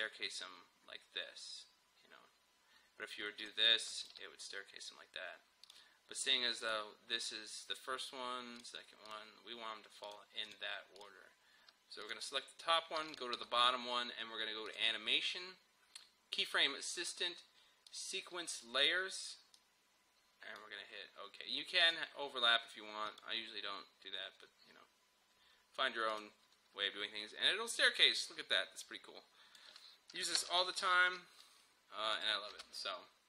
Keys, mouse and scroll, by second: 3.5 click, 13.0 typing, 13.1 shift+click, 16.6 typing, 17.9-21.8 drag, 18.2 typing, 26.2-30.4 drag, 30.4 End, 30.9 alt+], 31.1 Home, 32.2 click, 32.6 space.